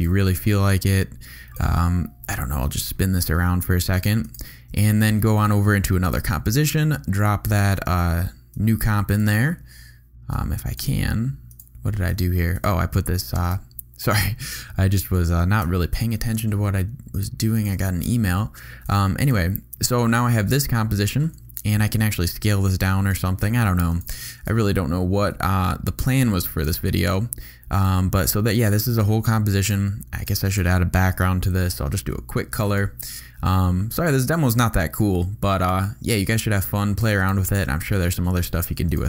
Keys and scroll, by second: 0.1 r, 15.4 super+c, 15.9 super+Delete, 16.7 Delete, 17.8 super+v, 21.8 a, 24.3 super+z, 25.1 super+s, 26.7 v, 31.5 super+y.